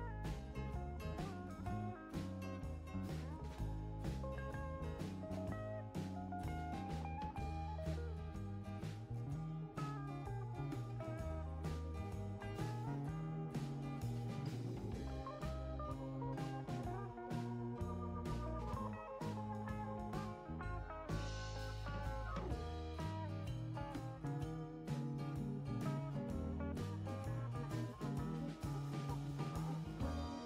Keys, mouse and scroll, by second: 0.0 click, 2.1-2.5 scroll up 3, 6.4 click, 8.7 click, 12.9 click, 14.9 click, 16.4 click, 21.1 click, 22.2-22.7 scroll down 4, 24.7 click, 27.3 click.